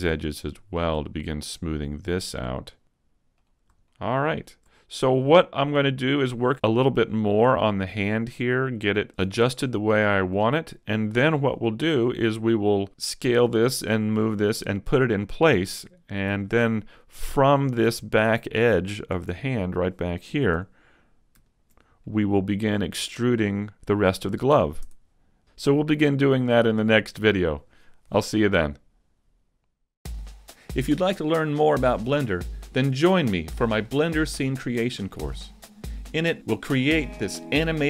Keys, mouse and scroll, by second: 0.1 click, 1.7 click, 3.3 middle click, 3.3-3.7 scroll down 3, 3.9 shift+middle click, 4.3-4.7 scroll up 1, 4.7 shift+middle click, 5.8 shift+middle click, 6.3 middle click, 7.5 middle click, 10.4 middle click, 17.1 middle click, 19.1 Tab, 20.3 ctrl+Tab, 21.4 alt+right click, 22.0 middle click, 24.9 Tab, 25.5 a, 26.0 middle click.